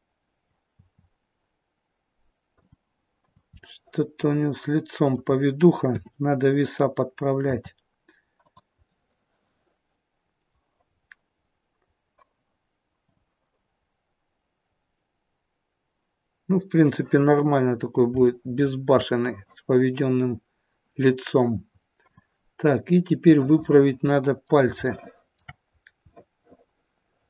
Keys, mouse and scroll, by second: 0.6 r, 3.1 click, 3.7 middle click, 5.8 KP_7, 7.4 r, 8.8 middle click, 10.8-11.2 scroll up 3, 11.2-11.7 scroll down 2, 13.0 click, 13.6-14.4 scroll down 1, 14.8-15.8 scroll down 3, 17.1 middle click, 18.2 shift+middle click, 19.7-20.2 scroll up 1, 22.0 click, 23.3 middle click, 24.8 shift+middle click, 25.6 scroll up 1, 25.9 middle click.